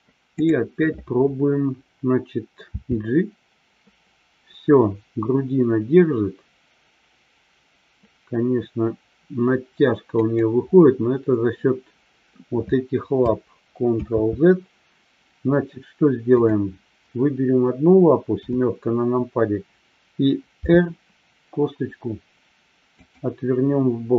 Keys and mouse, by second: 14.5 ctrl+z, 18.3 KP_7, 20.6 r.